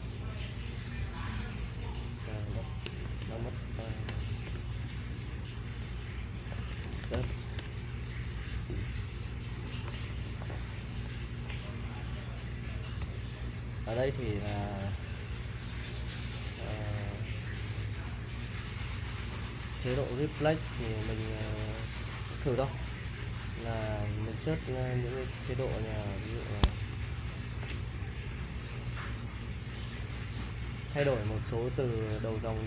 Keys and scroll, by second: 0.0-0.4 typing, 3.0-7.7 typing, 9.6-13.0 typing, 22.6 /, 26.6 Escape, 26.9 k, 27.1 k, 27.6 j, 28.3 j.